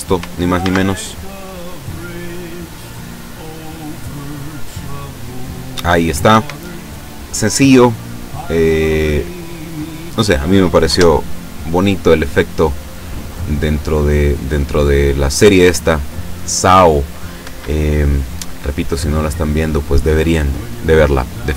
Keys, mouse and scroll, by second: 0.6 alt+a, 6.4 Escape, 9.6 click, 10.9 F12, 17.5 Escape, 19.7 click.